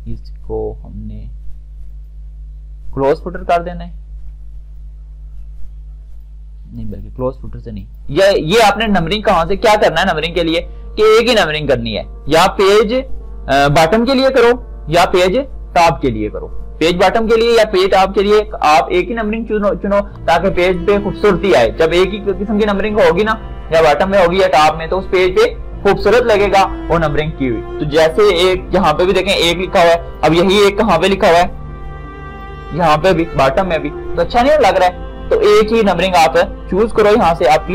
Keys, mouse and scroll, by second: 2.1 click, 5.0-7.0 drag, 30.2-35.1 drag, 31.0 typing, 37.6 click.